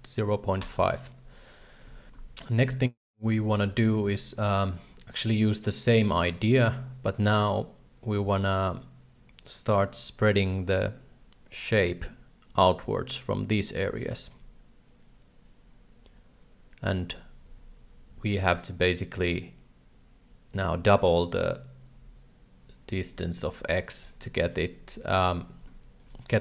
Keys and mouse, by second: 2.5 shift+middle click, 3.2 shift+middle click, 4.2 shift+middle click, 7.5-11.7 drag, 12.4 click, 12.9 click, 13.6 click, 14.0 click, 14.9 click, 15.2 click, 16.0 click, 16.4 click, 26.0 shift+middle click.